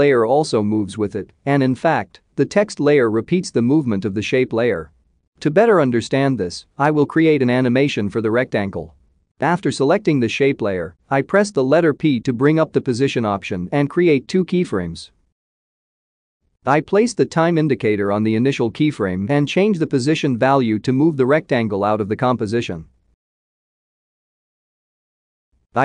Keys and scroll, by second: 11.4 p.